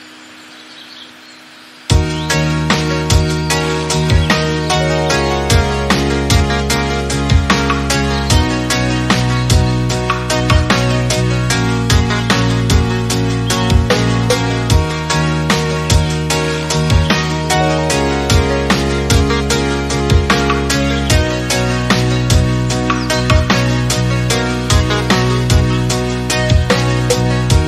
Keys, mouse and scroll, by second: 2.4 middle click, 2.7-3.6 scroll up 1, 3.6 click, 7.0 click, 7.1 scroll down 4, 7.2-8.8 middle drag, 8.8 scroll up 1, 9.1-9.8 shift+middle drag, 9.8 click, 11.1-13.4 scroll down 1, 13.4 click, 14.5-14.9 middle drag, 14.9 click, 16.9-19.0 drag, 19.1-19.6 scroll up 4, 19.6 scroll down 2, 19.8-20.9 middle drag, 20.9-21.8 scroll up 3, 21.8 click, 22.8-26.5 drag.